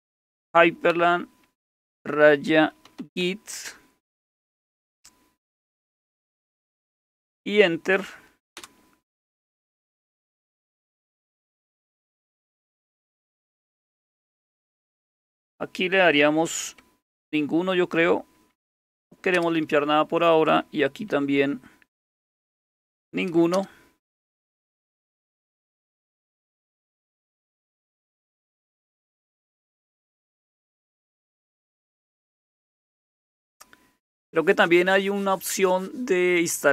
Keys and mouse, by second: 0.0-0.8 typing, 1.9-3.7 typing, 8.5 Return, 18.7 shift+n, 19.4 Return, 22.9 shift+n, 23.6 Return.